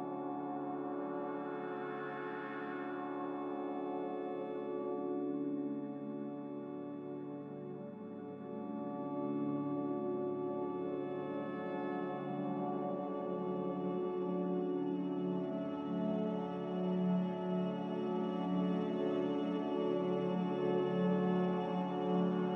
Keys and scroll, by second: 2.1 ctrl+c, 5.1 ctrl+v, 5.6 Escape, 8.7 ctrl+c, 12.4-15.5 typing.